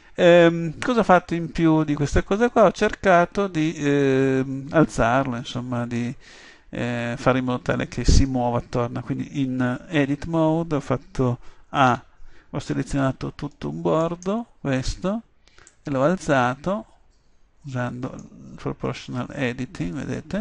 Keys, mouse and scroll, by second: 10.1 Tab, 12.0 a, 17.5 middle click, 17.5-18.5 scroll up 1.